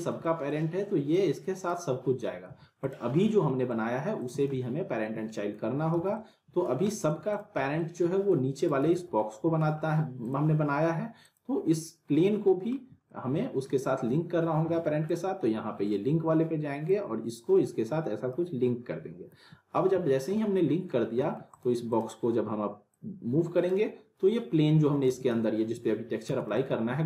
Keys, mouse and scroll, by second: 0.2 alt+middle click, 1.1-1.8 click, 2.1 scroll down 1, 2.5 ctrl+z, 2.8 click, 3.1 scroll up 1, 3.2-3.9 alt+middle click, 4.2 click, 4.3 z, 4.5-5.8 alt+middle click, 5.7 scroll down 1, 5.9 z, 6.1-6.8 alt+middle click, 6.6 scroll down 1, 6.9 alt+middle click, 7.3 click, 7.6 scroll down 1, 7.8-8.4 alt+middle click, 8.6 click, 8.8 z, 9.2-9.8 alt+middle click, 10.2 click, 12.1 scroll up 1, 12.4 middle click, 13.0-13.7 alt+middle drag, 15.1-18.4 drag, 19.9 w, 20.3-21.0 middle click, 21.0 scroll down 1, 21.2 alt+middle click, 21.5-23.8 drag, 25.0 ctrl+z, 25.4 alt+middle click, 26.2 z, 26.5-27.0 alt+middle click.